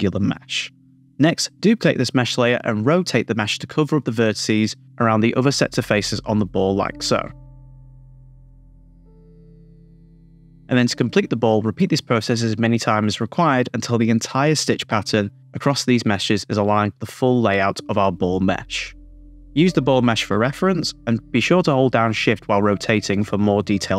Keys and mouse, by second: 0.0 click, 0.5 click, 0.9 x, 2.1 click, 3.0 click, 3.4 shift+d, 3.6 r, 3.6 z, 4.6 r, 5.6 middle click, 6.9-8.0 typing, 7.6 middle click, 8.0 Return, 8.2 click, 8.6 shift+click, 9.2 middle click, 9.4 middle click, 9.7 click, 9.8 typing, 10.0 Return, 10.4 Tab, 10.6 middle click, 10.6 super+z, 10.8 click, 11.2 super+z, 11.5 click, 11.7 shift+d, 12.1 shift+click, 12.3 shift+click, 12.5 middle click, 12.9 middle click, 13.5 shift+d, 13.6 super+z, 13.7 shift+d, 14.1 click, 15.3 middle click, 16.0 click, 16.2-18.2 typing, 16.4 KP_Subtract, 16.8 click, 18.8 click, 19.2 shift+click, 19.6 middle click, 19.7-20.6 typing, 20.2 shift+click, 20.4 middle click, 20.8 click, 21.6 shift+super+z, 22.5 shift+click, 22.7 middle click, 22.8 Tab, 23.5 super+z, 23.9 r.